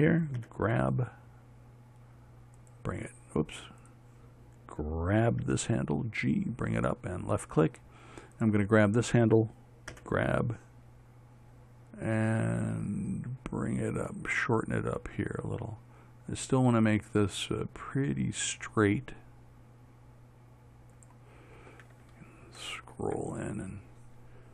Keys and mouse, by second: 0.9 g, 4.3-7.3 drag, 5.9 g, 8.8-13.6 drag, 10.4 g, 23.5 middle click.